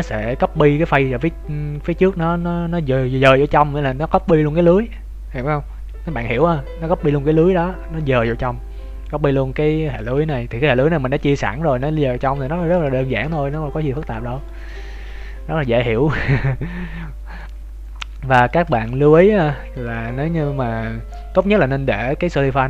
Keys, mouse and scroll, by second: 10.3 Tab, 10.7 middle click, 11.5 Tab, 12.5 ctrl+s, 13.0 shift+middle click, 13.4 middle click, 16.9 scroll up 1, 17.0 middle click, 18.8 shift+middle click.